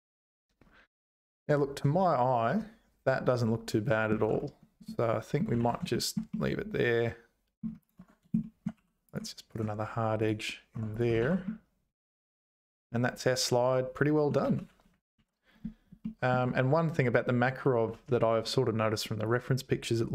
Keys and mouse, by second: 4.1 Tab, 4.8 middle click, 5.6 ctrl+s, 5.9 shift+middle click, 6.3-7.6 middle drag, 8.0 Tab, 8.4 shift+click, 8.8 2, 9.1 click, 9.6 right click, 10.7 Tab, 11.2 ctrl+s, 11.5-14.2 middle drag, 14.2 click, 14.5 `, 15.1 alt+h, 16.1 shift+click.